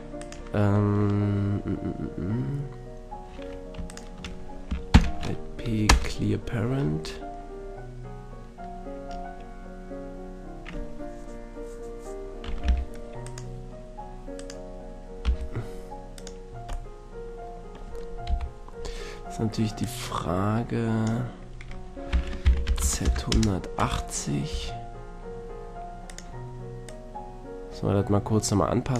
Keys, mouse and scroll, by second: 0.2-2.1 right drag, 3.9-5.7 right drag, 4.9 alt+p, 9.1-12.6 middle drag, 12.6 g, 13.4-16.2 right drag, 15.2 g, 16.3-16.9 drag, 16.9-18.2 middle drag, 18.2 click, 18.3 KP_3, 19.8-21.6 drag, 22.1 r, 23.8-26.2 middle drag, 24.5 s, 26.2-28.7 drag.